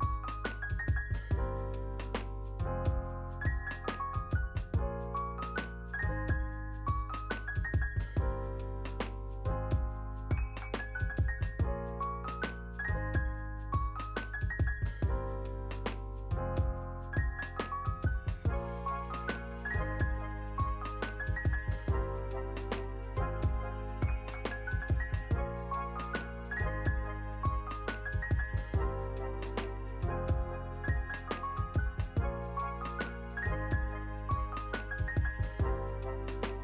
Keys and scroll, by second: 3.5 space, 10.5 space, 15.3 space.